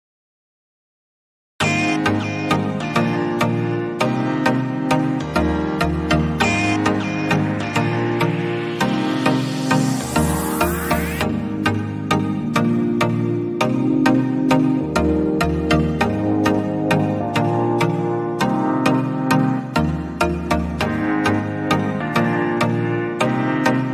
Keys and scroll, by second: 9.2 ctrl+c, 10.9 ctrl+v, 16.3 Left, 17.1 ctrl+a, 17.4-19.8 typing, 21.1-23.9 typing.